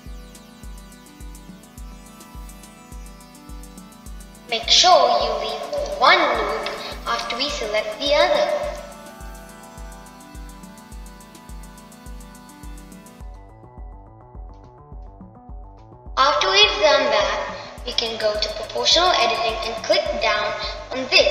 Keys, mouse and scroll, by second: 0.4 alt+shift+click, 0.8-2.8 middle drag, 2.8 alt+shift+click, 4.2 alt+shift+click, 5.4 alt+shift+click, 7.6 alt+shift+click, 8.6-11.1 middle drag, 11.1 alt+shift+click, 12.2 alt+shift+click, 12.6-15.0 shift+middle drag, 15.0 alt+shift+click, 16.4 alt+shift+click, 16.9-21.3 middle drag.